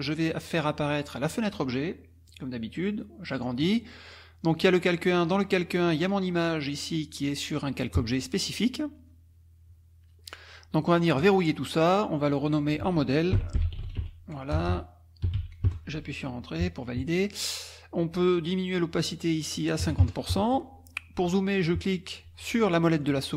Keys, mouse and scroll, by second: 0.5 click, 1.2 click, 2.3-3.5 drag, 4.0 click, 4.5 click, 5.2 click, 6.0 click, 11.2 click, 12.3 click, 13.1-15.8 typing, 19.1 click, 19.8 KP_5, 20.0 KP_Enter, 22.9 click.